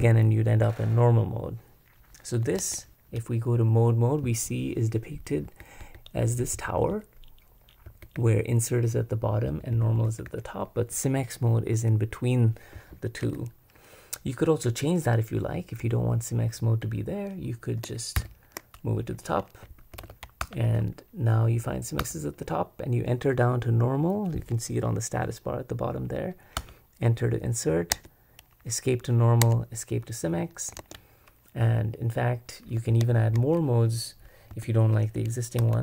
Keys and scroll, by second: 2.6 super+Escape, 5.4-6.8 typing, 7.9 typing, 9.2-10.7 typing, 12.5-13.7 typing, 18.1 shift+k, 19.7-20.6 typing, 22.0 Return, 26.6 Return, 27.9 Escape, 29.4 Escape, 30.8 super+Escape, 32.8 y, 33.1 shift+p, 34.5 c, 35.6-35.8 typing.